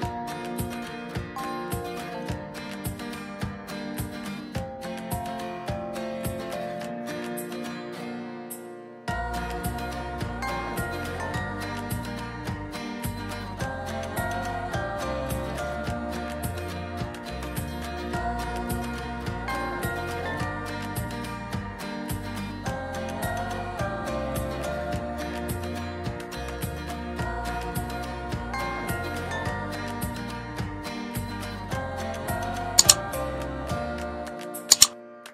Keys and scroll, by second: 29.4 ctrl+z.